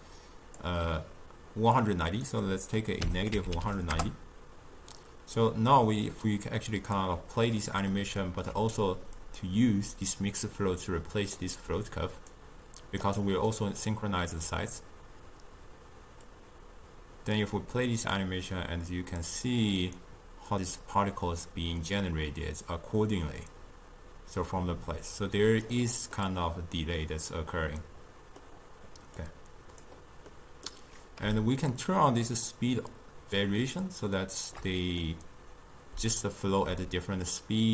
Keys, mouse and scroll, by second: 2.2-5.2 drag, 6.1-7.7 drag, 7.7-9.3 middle drag, 9.3-11.5 drag, 12.4 click, 13.3-16.3 middle drag, 16.3-24.1 drag, 26.2-29.3 middle drag, 29.3 click, 30.4-31.5 middle drag, 31.5-35.1 shift+drag, 35.1-37.3 middle drag, 37.3-37.7 drag.